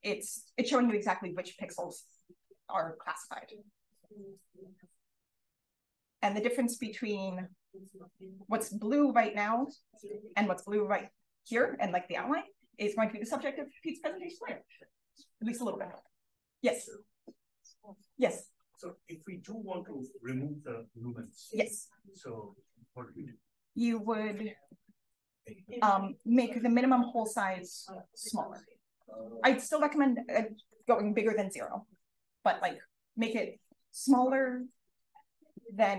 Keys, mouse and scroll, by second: 0.4-3.9 scroll up 2, 3.9-6.1 scroll up 1, 6.1-6.7 scroll up 1, 6.7-9.9 scroll up 1, 9.9 click, 9.9-11.1 scroll up 1, 11.1-16.3 scroll up 1, 16.3-18.5 scroll up 1, 18.5-19.6 scroll up 1, 19.6-21.5 scroll up 1, 21.5-23.7 scroll up 1, 23.7 click, 24.6 click, 25.1 click, 26.1 click, 26.4 click, 27.4 click.